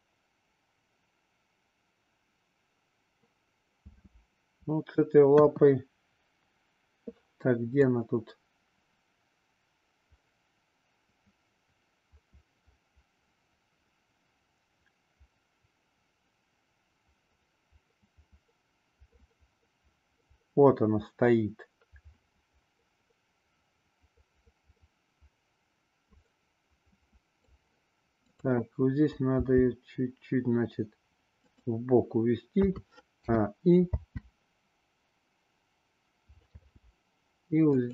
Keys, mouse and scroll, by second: 3.9 space, 5.3 KP_1, 7.8-27.6 drag, 29.3 g, 32.6 a, 33.2 i, 33.9 space, 36.5 space, 37.7 click.